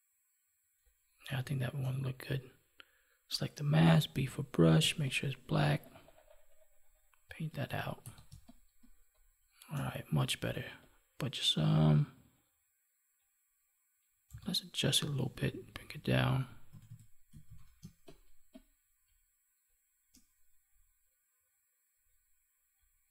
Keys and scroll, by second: 7.6 ctrl+s, 8.2 space, 17.4 ctrl+s, 17.7 space.